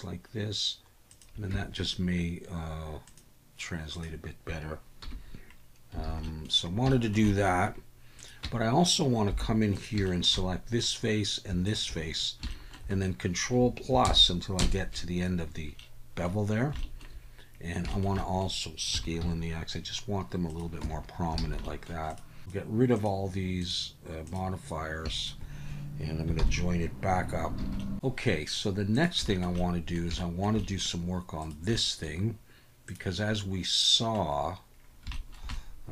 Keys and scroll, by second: 1.5 Tab, 5.0 /, 6.1 alt+a, 8.4 Tab, 9.3 3, 14.1 ctrl+KP_Add, 14.6 ctrl+KP_Add, 18.9 s, 19.2 x, 20.8 Tab, 21.4 alt+a, 26.4 ctrl+j, 27.6 alt+a, 27.6 alt+s.